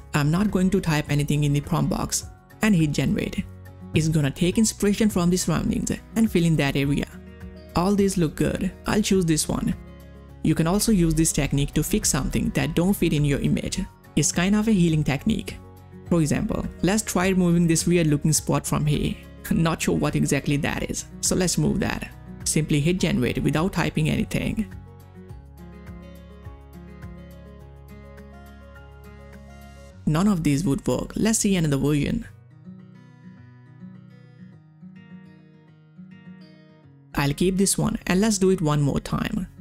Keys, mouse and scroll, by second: 1.7 click, 5.7 click, 5.7 click, 11.2 space, 11.2 click, 11.7 space, 12.9 space, 14.0 space, 14.3 click, 14.4 space, 16.6 ctrl+scroll up 1, 17.1 space, 17.2-23.7 drag, 25.3 ctrl+scroll down 1, 25.4 space, 25.5 click, 25.7 space, 28.2 space, 28.2 click, 30.3 click, 34.3 click, 34.3 click, 38.6 ctrl+scroll up 1.